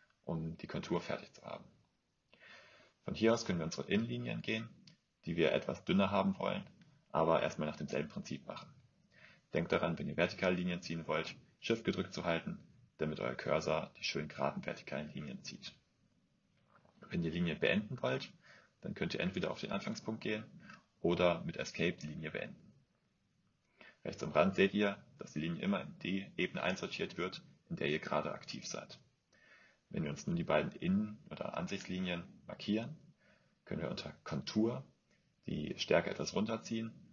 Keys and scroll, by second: 0.0 Escape, 11.0 BackSpace, 23.0 Home, 23.3 Home, 23.5-24.3 typing, 26.3 typing, 27.8 typing.